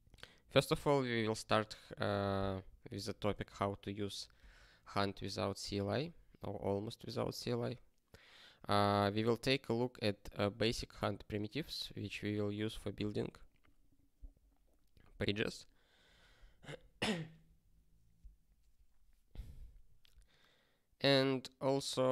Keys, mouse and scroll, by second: 3.3 ctrl+space, 3.4 ctrl+n, 4.3 ctrl+g.